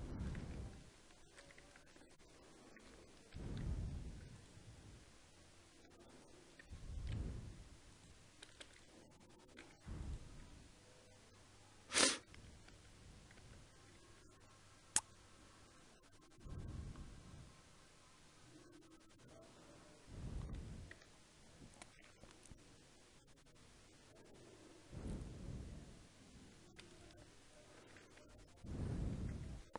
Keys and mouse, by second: 0.2 z, 1.4 a, 1.8-3.2 drag, 3.2 ctrl+e, 5.9-8.3 drag, 6.9 ctrl+e, 8.3 a, 8.5 a, 9.4 u, 12.5 z, 13.2 z, 13.8 a, 20.1-21.8 right drag, 21.0-26.6 middle drag, 26.6 a, 27.3-29.3 right drag, 27.9 z, 29.0 z.